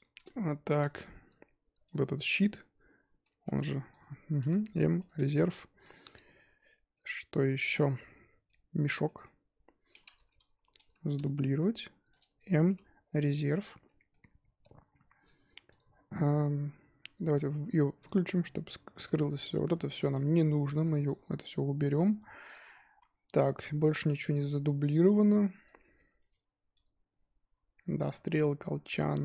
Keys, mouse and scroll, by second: 0.2 scroll down 2, 0.4-1.8 shift+middle drag, 1.8 click, 3.4 g, 4.4 m, 5.8 click, 6.0-8.8 middle drag, 8.8 click, 9.0-9.6 middle drag, 9.6-11.0 scroll up 2, 11.0-11.5 scroll down 3, 11.5 shift+d, 12.6 m, 13.6-15.7 middle drag, 15.7 click, 18.0 click, 18.9-19.3 middle drag, 19.3-20.7 drag, 20.7 x, 21.4-22.1 middle drag, 22.1-22.4 scroll up 2, 22.4-22.8 middle drag, 22.8 z, 24.4-26.7 middle drag, 26.7 click.